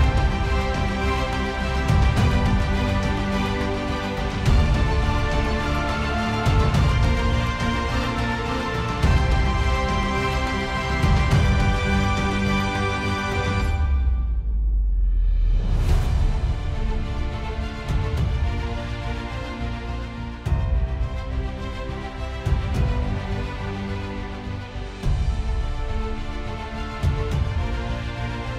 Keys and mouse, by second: 4.8 ctrl+z, 6.0 ctrl+z, 7.4 ctrl+z, 8.0 KP_Decimal, 8.3 KP_5, 8.5 Return, 11.2 KP_Decimal, 11.4 Return, 13.2 KP_1, 13.3 Return, 14.2 KP_Decimal, 14.4 KP_6, 14.7 Return, 14.9 KP_Decimal, 15.1 Return, 19.3 ctrl+z, 25.4 ctrl+z.